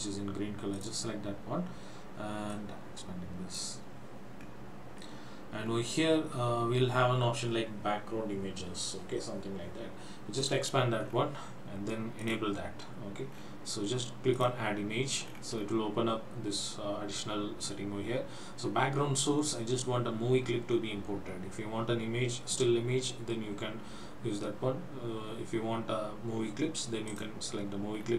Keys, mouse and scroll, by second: 0.8 click, 2.5 click, 3.8-4.2 scroll up 2, 4.6-5.6 scroll down 1, 5.7 scroll down 2, 10.5 click, 11.1-12.3 scroll down 2, 12.3 click, 13.4 scroll down 2, 14.5 click, 15.4-15.8 scroll down 2, 27.2 click, 28.0 scroll down 2.